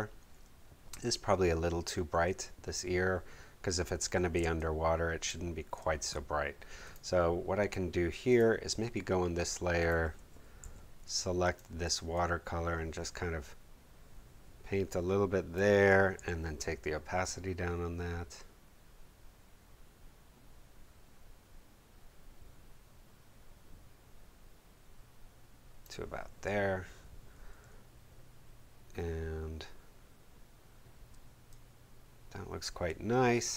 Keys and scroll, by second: 4.3 space, 10.6 b, 16.1 v, 31.1 space.